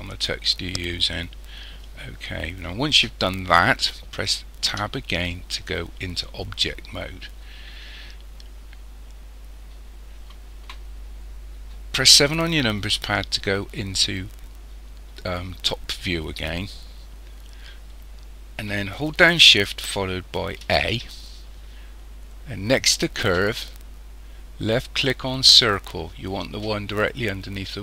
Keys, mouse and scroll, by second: 4.8 Tab, 8.1 scroll down 2, 9.2-11.0 scroll down 1, 12.0 KP_7, 17.1-20.3 scroll down 1, 20.6 shift+a.